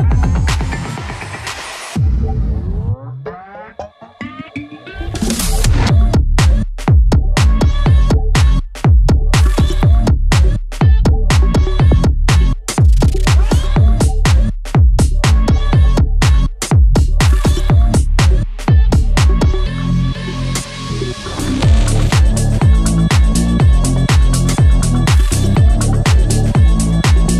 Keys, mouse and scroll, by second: 3.2 click, 6.9-7.8 scroll up 1, 8.2 click, 11.7-18.0 drag, 18.0 ctrl+z, 18.4-19.9 drag, 20.3-24.3 drag.